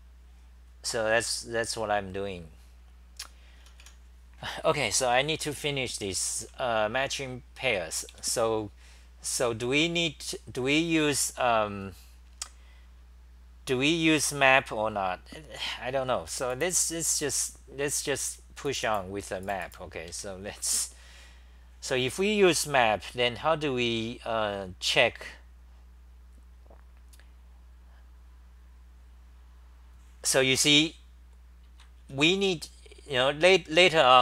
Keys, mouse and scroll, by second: 3.6 t, 3.8 t, 6.1-7.7 typing, 31.3-31.8 scroll down 6, 31.3 ,, 32.0 ctrl+g, 32.0 t, 32.2 t.